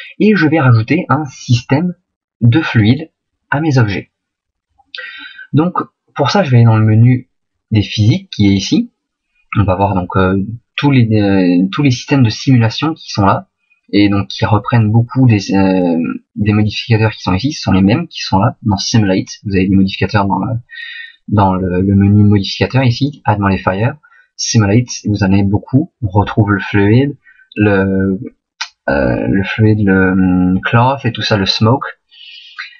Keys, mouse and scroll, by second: 2.8 right click.